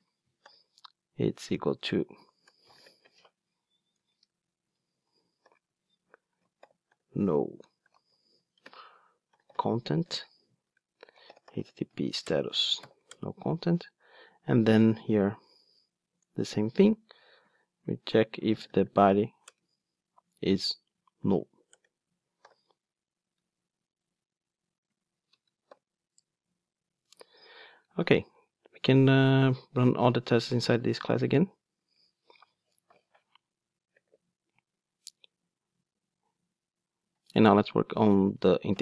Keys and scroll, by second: 2.9 ctrl+space, 3.9 Return, 7.0 Return, 8.9 ctrl+space, 10.7 alt+BackSpace, 12.2 Return, 16.4 Return, 16.5 super+v, 19.4 Return, 26.3 Return, 30.9 ctrl+shift+d.